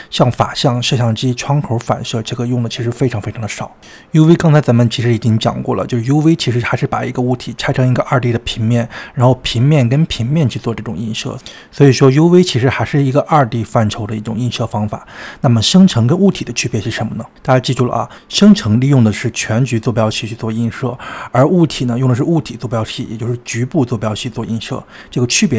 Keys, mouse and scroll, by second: 0.1-0.6 scroll up 1, 4.1-5.0 scroll up 2, 5.0-7.7 middle drag, 7.7 click, 19.6 drag, 22.0-22.4 scroll down 2, 22.4-23.6 middle drag, 23.6-25.4 scroll down 3.